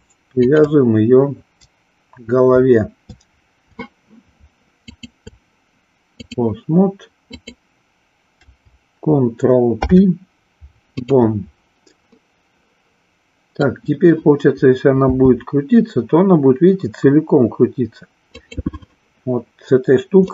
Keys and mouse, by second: 0.4 shift+click, 4.9-6.3 shift+drag, 7.3 click, 9.6 ctrl+p, 12.2-13.6 middle drag, 15.0 r, 18.5 click.